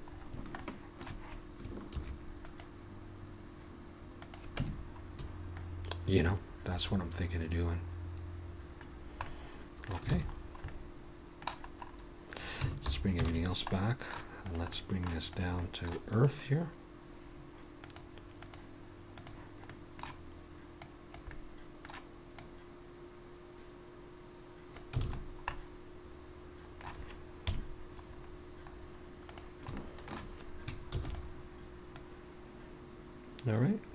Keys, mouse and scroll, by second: 0.1-0.6 scroll up 3, 0.6 shift+middle click, 1.9 ctrl+r, 4.6 Tab, 4.7-5.6 scroll down 5, 5.6 middle click, 8.9-9.3 scroll down 2, 9.3 middle click, 10.1 alt+a, 10.4-11.1 scroll down 4, 10.7 middle click, 11.7-12.5 scroll up 1, 12.5-12.9 scroll up 1, 12.9 alt+h, 13.3 alt+a, 13.7 middle click, 14.4 click, 14.7 middle click, 15.3 click, 15.6 middle click, 16.1 click, 17.8 click, 19.7 middle click, 20.8 click, 21.3 middle click, 22.4 click, 25.0 alt+a, 25.2-26.2 scroll down 4, 26.2 middle click, 27.5 KP_3, 28.1-28.6 scroll up 4, 28.7-29.1 scroll down 3, 29.3 click, 29.8 shift+middle click, 31.0 shift+d, 31.9 click.